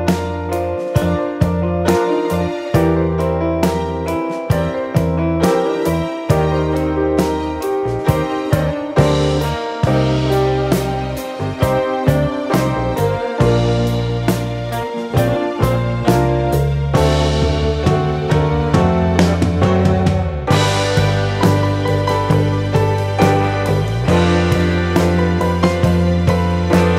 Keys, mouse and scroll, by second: 1.0 F4, 1.8 F9, 4.6 ctrl+o, 5.6 scroll down 1, 9.7-10.3 scroll down 1, 11.5-12.1 scroll down 1, 13.1 click, 14.2 click, 23.9 F4, 25.6 F9.